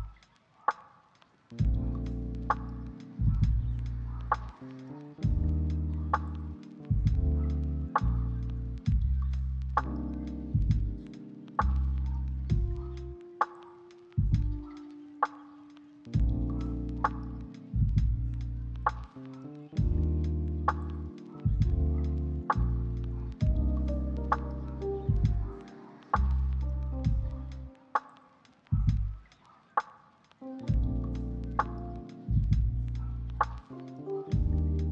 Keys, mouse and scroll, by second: 4.5 g, 5.4 ctrl+click, 6.3 g, 8.1 ctrl+click, 9.8 g, 12.7 ctrl+click, 13.4 g, 14.1 ctrl+click, 15.8 g, 16.8 ctrl+click, 19.9 g, 20.9 ctrl+click, 22.4 g, 23.4 ctrl+click, 23.8 r, 25.0 ctrl+click, 27.0 g, 30.2 g, 34.2 ctrl+middle click.